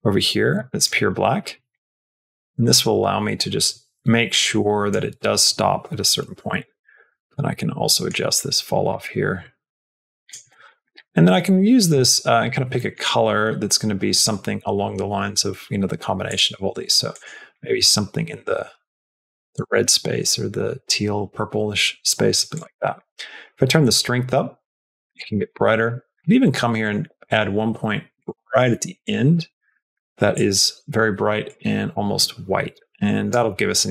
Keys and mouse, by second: 1.6-4.8 drag, 6.4-7.9 drag, 8.8-10.2 drag, 10.5 middle click, 10.7 middle click, 11.1 middle click, 11.4 middle click, 11.8 middle click, 12.6 middle click, 22.4 click, 22.6 middle click, 23.6-25.1 drag, 25.4 middle click, 25.7 middle click, 26.6 click, 28.0 click.